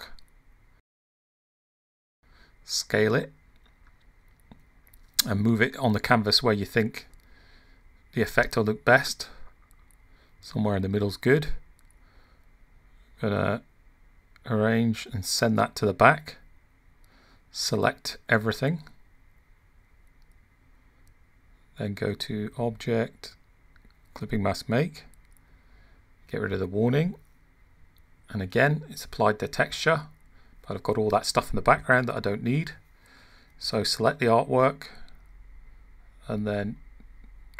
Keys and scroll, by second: 0.4 super+v.